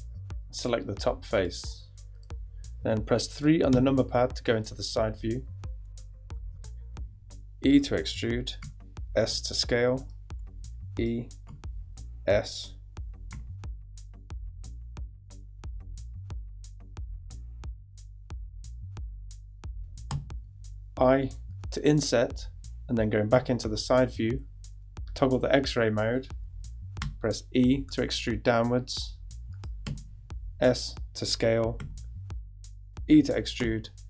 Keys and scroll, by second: 3.7 3, 4.4 super+3, 6.8 super+e, 8.6 s, 10.4 e, 12.2 s, 13.3 e, 14.5-17.2 typing, 16.7 super+e, 20.1 i, 23.3 3, 27.0 e, 29.8 s, 31.8 e, 33.6 s.